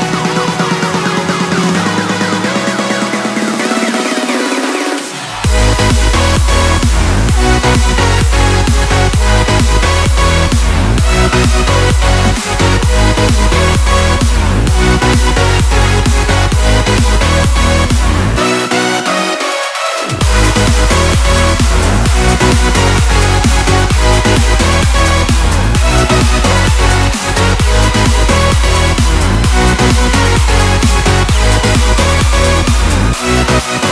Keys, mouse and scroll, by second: 0.8 ctrl+a, 1.2 ctrl+c, 1.6 click, 2.2 ctrl+v, 2.8-14.4 drag, 18.2-21.9 drag, 22.2 click, 24.9 click, 29.3 click, 31.1 ctrl+a, 31.7 ctrl+c, 32.1 click, 32.9 ctrl+v.